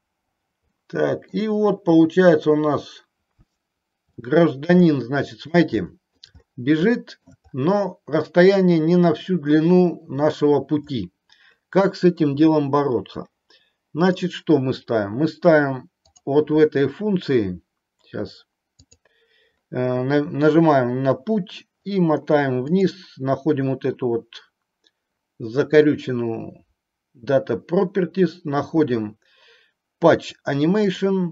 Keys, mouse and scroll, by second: 0.8-1.4 middle drag, 4.3-4.8 middle drag, 4.9-5.7 middle drag, 5.9-6.3 middle drag, 7.2 middle drag, 14.2 click, 19.0 click, 31.0 click.